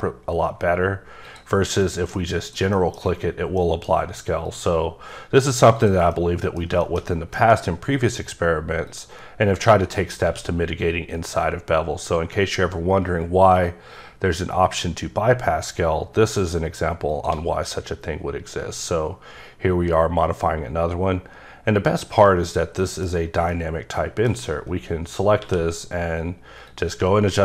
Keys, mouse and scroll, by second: 1.3 click, 1.5 scroll down 3, 1.7 scroll up 1, 1.8 middle click, 2.4 click, 2.7 middle click, 3.6 middle click, 4.4 click, 5.8 click, 6.1 middle click, 6.8 double middle click, 7.1 middle click, 7.3 scroll up 2, 8.9 click, 9.6 click, 10.2 q, 15.5 shift+Num_Lock, 17.1 shift+click, 21.9 click, 22.4 click, 22.8 middle click, 23.5 middle click, 24.8-25.4 scroll up 1, 25.4 q, 26.6 click.